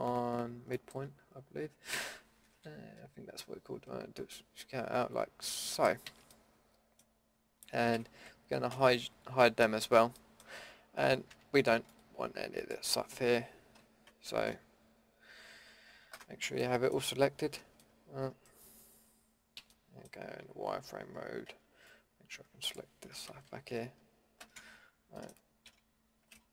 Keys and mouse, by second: 1.9 s, 6.0 a, 6.4-6.9 drag, 7.9 ctrl+z, 8.7 h, 11.3 b, 14.5 ctrl+KP_Add, 15.0 ctrl+KP_Add, 19.6 z, 21.5 b, 23.5 ctrl+KP_Add, 24.0 ctrl+KP_Add, 25.7 z.